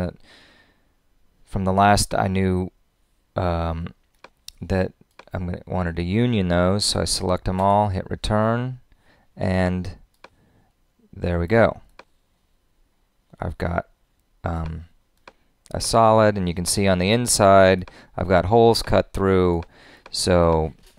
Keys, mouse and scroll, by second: 7.6 Return.